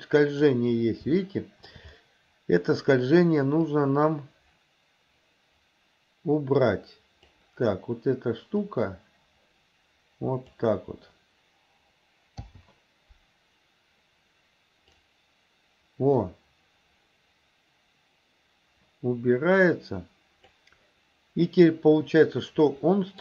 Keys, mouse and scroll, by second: 1.2-1.7 shift+middle drag, 3.8-7.4 drag, 8.6 click, 8.9-10.6 drag, 12.5 i, 15.0-20.6 drag, 22.4-23.2 middle drag.